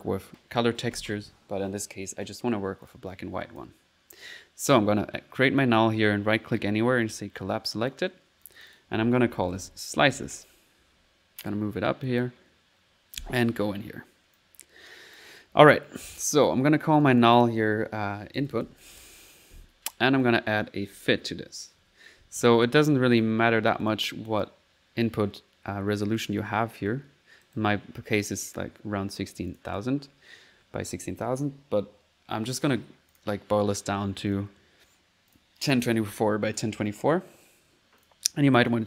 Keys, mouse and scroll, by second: 2.8 click, 3.1 click, 3.8 click, 5.6 click, 6.0 right click, 7.1 click, 7.7 click, 8.2 click, 11.4 click, 12.0 click, 12.5 click, 14.4 click, 15.7 click, 16.4 click, 17.0 click, 20.2 right click, 20.5 click, 20.7-21.8 typing, 20.8 click, 23.2 click, 23.8 click, 24.3 click, 27.7-28.5 typing, 29.5 click, 30.8 middle click, 33.1 click, 34.3 click, 35.3 click, 38.0 click, 38.6 click.